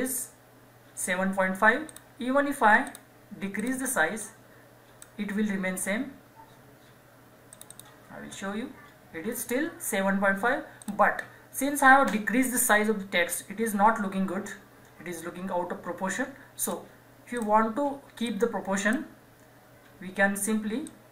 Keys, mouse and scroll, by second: 1.9-6.3 drag, 7.5 click, 10.8 click, 16.6 click.